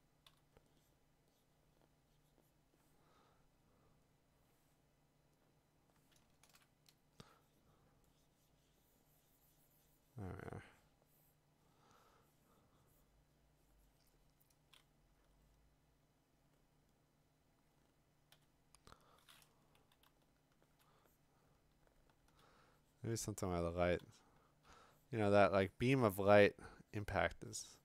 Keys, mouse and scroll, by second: 0.0-0.8 typing, 3.7 click, 4.3 click, 5.9 click, 6.5 Return, 15.1 x, 18.3 1, 20.0-20.8 [, 21.5-22.4 [, 24.0-24.7 ].